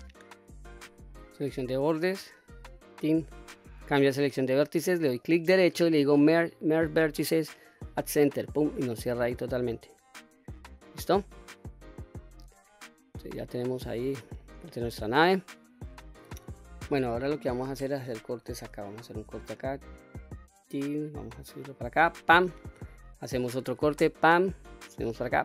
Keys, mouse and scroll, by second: 1.2 2, 1.6 click, 2.7 alt+click, 3.9 1, 5.3-8.2 right drag, 9.3 middle click, 9.8-10.3 middle drag, 10.5-10.9 scroll down 1, 10.9-12.0 middle drag, 12.3 click, 12.8-13.5 scroll down 3, 13.5-14.0 scroll up 3, 13.9 middle click, 14.5 shift+middle click, 15.4 middle click, 16.1 ctrl+z, 16.1 scroll down 1, 16.3-16.9 scroll up 1, 16.9 middle click, 18.4 ctrl+r, 21.9 click, 23.0 ctrl+r, 25.1 click.